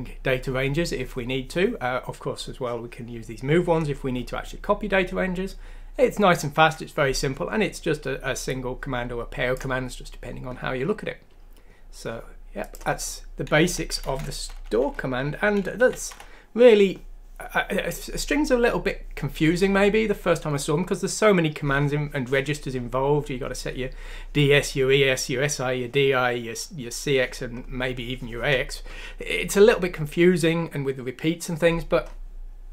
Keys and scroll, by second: 14.0 shift+Home, 14.8 shift+;.